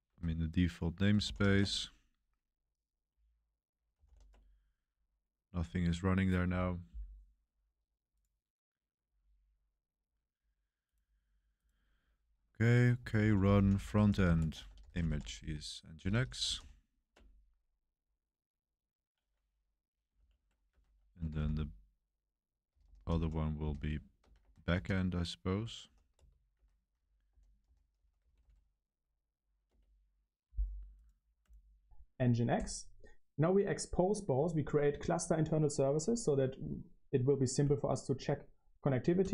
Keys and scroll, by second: 0.1 Escape, 0.5-1.9 typing, 3.8-4.5 typing, 12.8-17.1 typing, 17.1 Return, 20.4-30.1 typing.